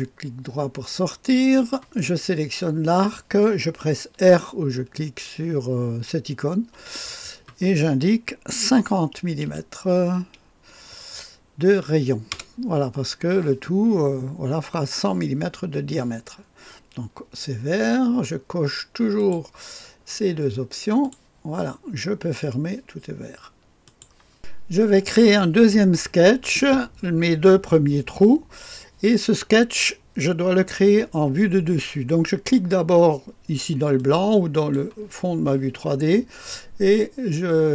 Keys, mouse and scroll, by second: 1.5 click, 2.1 click, 6.7 r, 8.7 KP_5, 9.4 KP_0, 12.3 Return, 19.2 click, 21.0 click, 23.8-25.0 drag, 33.9-35.4 drag.